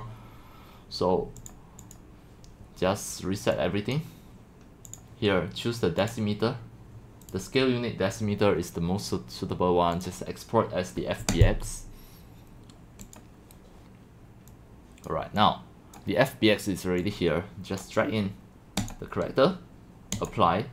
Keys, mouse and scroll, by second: 0.0-1.7 drag, 4.0-6.4 drag, 7.2 right click, 7.5 click, 10.0 right click, 11.3 click, 13.1 click, 14.6 click, 15.4-20.7 drag.